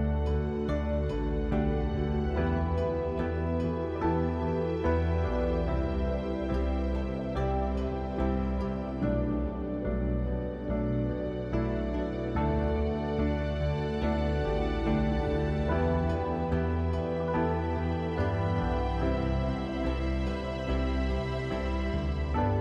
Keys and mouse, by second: 5.6 shift+click, 6.5 shift+click, 6.8 shift+click, 7.7 shift+click, 8.4 click, 9.5 shift+click, 10.4 shift+click, 10.7 shift+click, 11.3 shift+click, 11.8 middle click, 12.8 shift+click, 13.2 shift+click, 14.6 shift+click, 15.4 shift+click, 15.7 shift+click, 16.1-17.1 drag, 17.6 shift+click, 17.9 shift+click, 18.1 shift+click, 19.3 shift+click, 20.2 shift+click, 20.8 click.